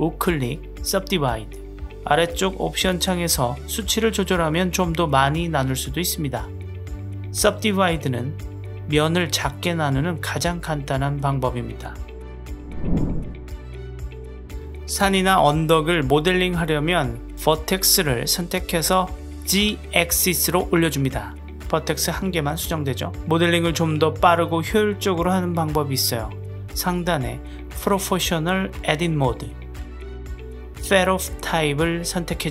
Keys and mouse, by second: 2.0-3.5 drag, 5.2-7.3 drag, 8.3-9.9 drag, 11.2-12.6 middle drag, 13.4-15.8 middle drag, 18.9 click, 19.6 middle click, 20.5 click, 20.7 g, 23.3 ctrl+z, 24.2 click, 29.8 click, 31.2-32.5 drag.